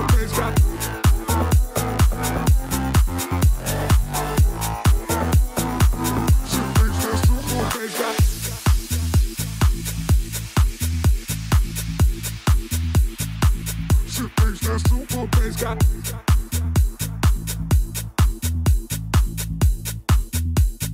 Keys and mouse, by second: 0.4-1.4 drag, 1.9 click, 2.6 0, 2.9 click, 4.1 click, 5.0-6.1 drag, 6.3 middle click, 6.7 click, 7.1 click, 7.6 click, 8.0-8.5 middle drag, 8.8 click, 9.8 click, 12.0-13.3 drag, 12.5 0, 13.8 click, 14.8 click, 16.3 click, 18.9 middle click, 19.8 click, 20.1 middle click, 20.5 click.